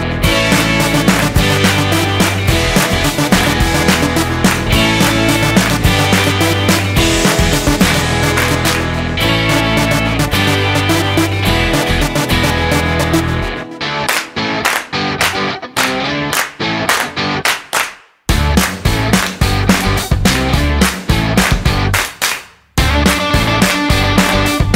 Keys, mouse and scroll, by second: 2.0 click, 6.7 scroll up 4, 9.2 click, 10.4 click, 11.9 click, 14.1 click, 15.6 click, 19.0 click, 19.9 click.